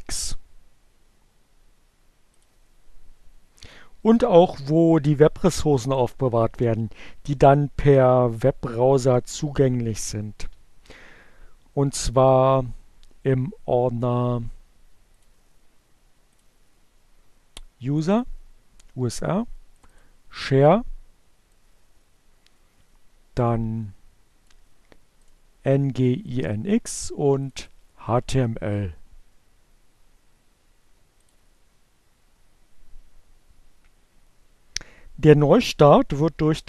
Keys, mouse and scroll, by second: 1.2 click, 5.1 click, 17.1 click, 18.1 click, 20.0 click, 21.8 click, 23.0-25.8 drag, 26.5 click, 27.0-27.8 drag, 28.6 click, 31.9 click.